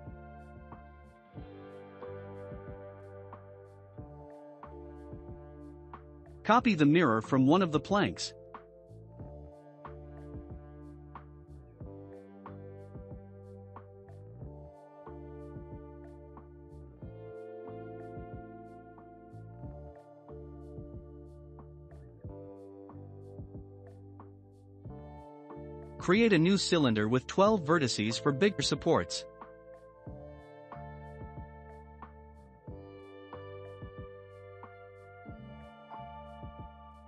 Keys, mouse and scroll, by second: 0.0-0.8 scroll down 2, 0.8 click, 1.3-5.0 shift+middle drag, 5.0 shift+click, 7.2 ctrl+l, 9.9 click, 10.5-11.1 scroll down 1, 11.1-12.1 shift+middle drag, 11.1 scroll down 2, 12.1 scroll up 1, 12.8-16.6 drag, 16.6-17.3 scroll down 4, 17.5-20.4 shift+middle drag, 20.4 click, 21.3-25.4 middle drag, 25.4 shift+a, 29.5-32.6 drag, 33.7-34.9 shift+middle drag, 34.9 click, 36.6 s.